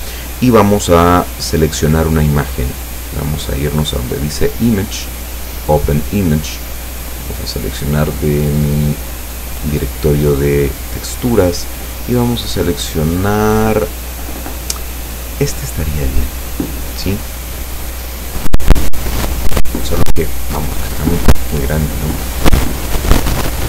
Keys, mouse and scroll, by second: 4.6 click, 5.6 click, 7.3 click, 8.9 click, 15.5 click, 17.5-17.9 scroll down 1, 18.2 scroll up 1.